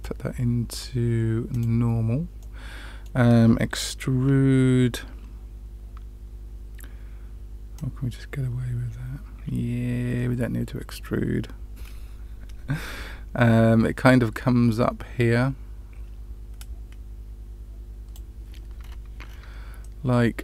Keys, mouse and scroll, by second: 2.3 middle click, 7.7-18.1 drag, 18.7-19.2 scroll down 3, 19.8-20.4 middle drag, 19.8 scroll down 1.